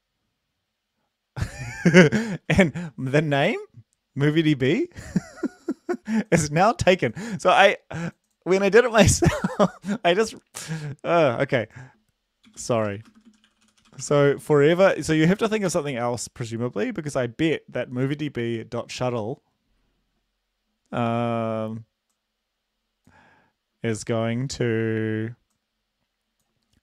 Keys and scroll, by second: 12.5-15.4 typing, 15.7 Return.